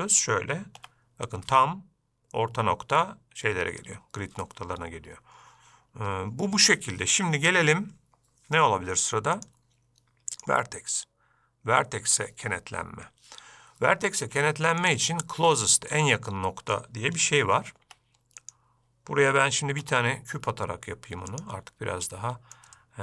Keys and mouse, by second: 1.2 g, 9.7-12.7 drag, 15.2 click, 15.9-17.1 middle drag, 18.2 x, 20.0 shift+a, 22.4-22.9 middle drag.